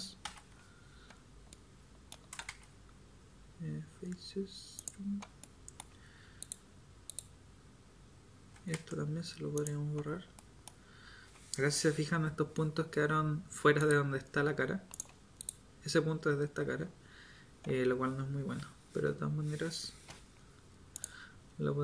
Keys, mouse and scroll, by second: 0.2 x, 8.7 x, 18.9 l, 20.1 k.